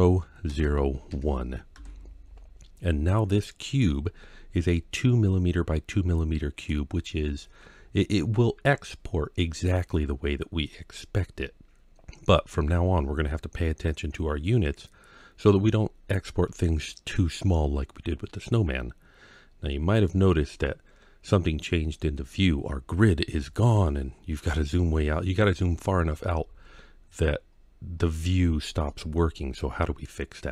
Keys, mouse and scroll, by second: 4.6-6.5 middle drag, 7.0-7.5 scroll down 3, 7.5-9.3 scroll up 2, 10.3 scroll down 3, 11.2-12.3 scroll up 2, 19.0-19.9 scroll up 1, 19.9-22.2 middle drag, 22.5-24.4 scroll down 11, 24.4-26.7 scroll up 10, 26.7 scroll down 2, 27.3-27.8 scroll up 2, 27.8-28.3 scroll down 2, 28.7-29.8 middle drag.